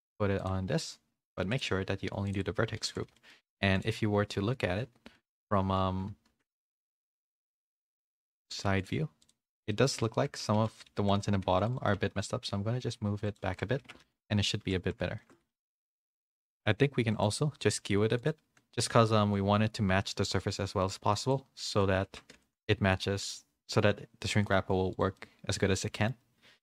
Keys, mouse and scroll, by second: 1.6 click, 3.3 middle click, 3.3 a, 3.8-5.1 drag, 5.1 KP_3, 5.5 KP_1, 6.1 ctrl+KP_1, 7.1 z, 8.0 a, 8.5 a, 9.7 shift+middle click, 10.2 Tab, 10.5 1, 10.8 a, 11.4 c, 11.9 g, 13.4-16.5 typing, 13.8 Tab, 14.4 middle click, 15.2 shift+middle click, 15.7 middle click, 16.1 click, 19.3-21.3 drag, 22.1 Tab, 22.1 z, 22.3 a, 22.6 middle click, 22.6 a, 23.2 shift+middle click, 23.6 middle click, 24.4 middle click, 25.1 middle click.